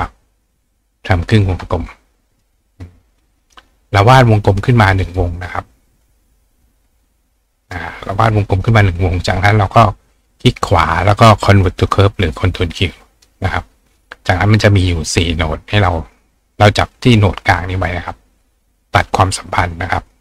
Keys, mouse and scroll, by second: 0.5 ctrl+click, 2.3 click, 3.4 right click, 5.1 click, 6.6 click, 7.3 click, 8.6 click, 9.7 right click, 11.7 click, 13.1 click, 13.9 click, 15.2 click, 16.2 click, 20.1 click.